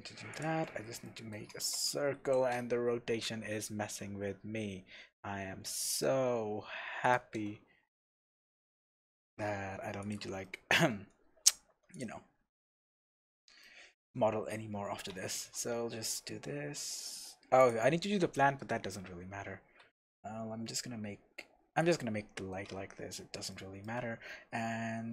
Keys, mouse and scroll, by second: 0.6-1.0 scroll up 2, 1.0-7.1 shift+middle drag, 1.4 scroll up 2, 1.7 r, 7.1 shift+click, 8.5 s, 10.1 click, 10.4-11.9 shift+middle drag, 11.2-11.9 scroll down 2, 11.9 click, 12.2 scroll up 1, 13.1 click, 13.6-14.5 shift+middle drag, 14.5-15.1 scroll up 2, 15.1 Tab, 15.4 f, 16.6 e, 17.6 middle click, 17.7 click, 18.8-19.8 scroll up 1, 19.8 s, 21.9 click, 22.5-23.5 scroll up 1, 23.5-25.1 shift+middle drag.